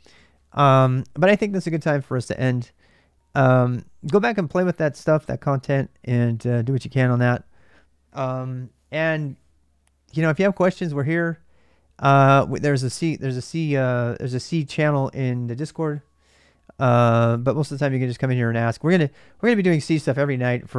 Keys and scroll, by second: 13.6 typing.